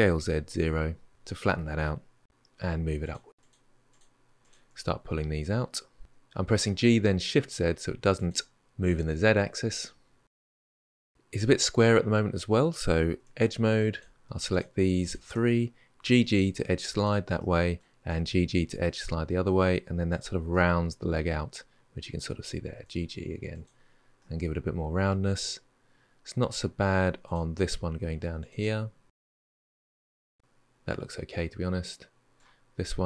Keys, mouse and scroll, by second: 2.1 g, 3.7 shift+click, 4.2 shift+click, 4.6-6.0 middle drag, 6.0 g, 8.9-10.8 middle drag, 13.0 2, 13.7 click, 14.3 shift+click, 14.8 shift+click, 15.8 g, 17.2 middle click, 17.8 g, 20.3-22.5 middle drag, 22.5 g, 24.0-27.0 middle drag, 27.0 ctrl+click, 28.2 alt+click, 29.0 middle click, 29.4 scroll up 1, 29.5 middle click, 29.6 click, 29.8 shift+click, 29.9 shift+click, 30.1-32.3 middle drag, 32.8 click.